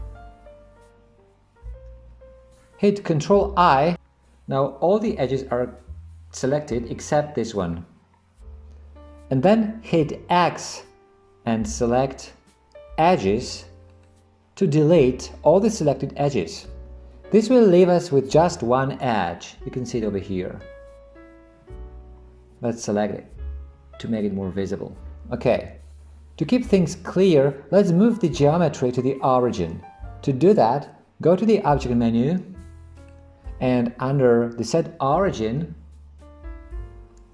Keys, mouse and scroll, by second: 3.9 ctrl+i, 11.7 x, 24.1 click, 25.9 Tab, 33.0-37.3 drag.